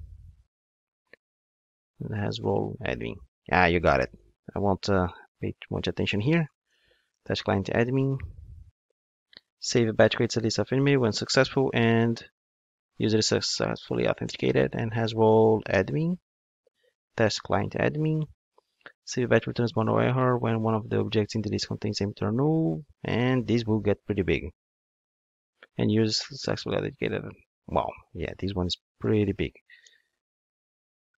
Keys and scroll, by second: 7.2 Return, 11.5 super+v, 17.5 Return, 23.8 super+v, 29.8 Return.